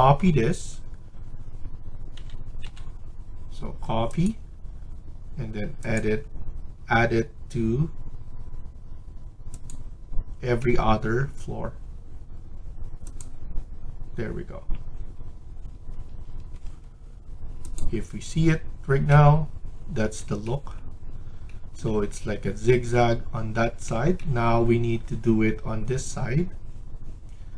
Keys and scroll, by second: 2.1-2.6 typing, 15.6 Escape, 16.0 Escape, 16.3 Escape, 16.6 Escape.